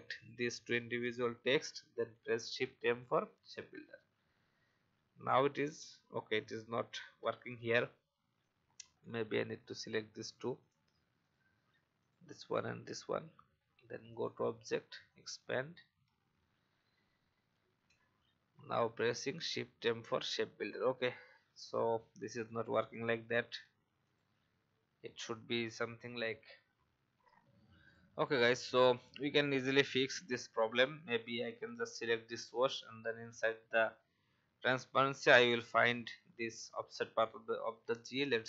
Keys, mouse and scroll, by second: 0.1 shift+click, 1.5 shift+m, 2.4 alt+scroll up 1, 6.1 alt+scroll down 1, 7.1 alt+v, 7.4 click, 10.1 alt+scroll down 1, 10.5 click, 12.0 shift+click, 14.1 click, 16.0-16.5 alt+scroll up 1, 17.5 shift+m, 18.8 alt+scroll up 1, 20.8 v, 21.7 alt+scroll up 1, 22.3 click, 24.0 shift+click, 27.1 F10, 27.8 click.